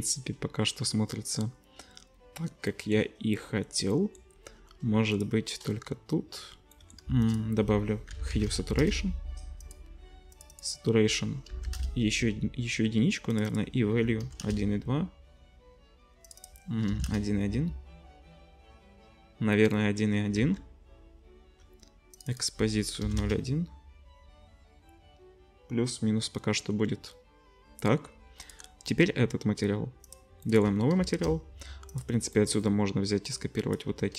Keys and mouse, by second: 5.2-10.5 middle drag, 7.2 shift+a, 10.5-14.4 drag, 20.4 ctrl+s, 28.6-30.1 middle drag, 31.1 shift+a, 32.1-33.3 drag.